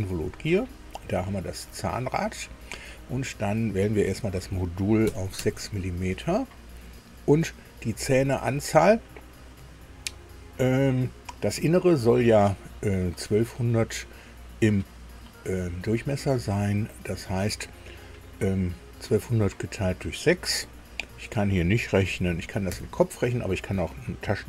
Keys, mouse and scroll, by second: 0.8 scroll up 1, 3.8 click, 5.0 KP_6, 5.5 Tab, 8.1 click, 22.7 ctrl+alt+r.